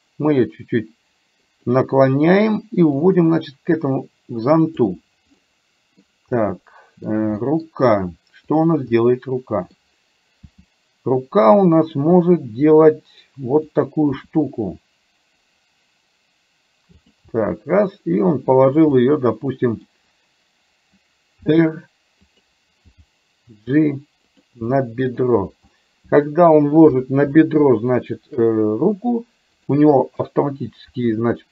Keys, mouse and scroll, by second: 3.1-5.1 drag, 5.4-5.9 scroll up 1, 6.4-6.8 scroll up 1, 6.8 middle click, 7.1 scroll down 1, 7.6 middle click, 8.9-9.9 middle drag, 10.4 g, 12.3-13.7 middle drag, 14.3 r, 17.3 g, 19.1 middle click, 21.4 r, 22.9 g, 24.8 middle click, 25.8 scroll up 1, 25.9 middle click, 26.3-26.9 scroll down 1, 26.9 KP_1, 27.9 shift+middle click, 29.7 click, 30.9 r.